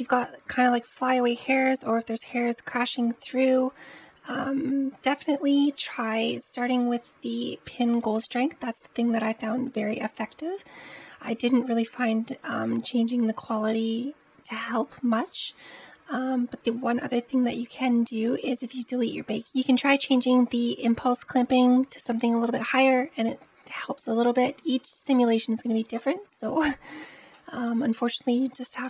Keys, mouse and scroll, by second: 5.1-6.0 scroll up 6, 11.0-12.3 scroll up 3, 12.3-13.6 scroll up 1, 13.6-16.4 scroll down 2, 16.4-19.3 scroll down 2, 27.2-28.8 middle drag.